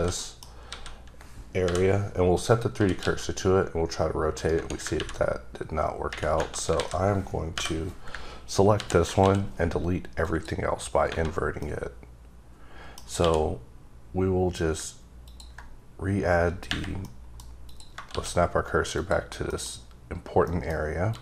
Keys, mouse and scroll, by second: 0.1 middle click, 0.6 a, 2.3 click, 2.8 r, 3.0 x, 4.3 right click, 6.8 alt+a, 7.5 l, 9.2 x, 11.6 middle click, 15.2 ctrl+click, 15.6 click, 17.0 middle click, 17.7 click, 18.1 shift+s, 18.9 click, 19.5 middle click, 20.5 middle click, 21.1 click.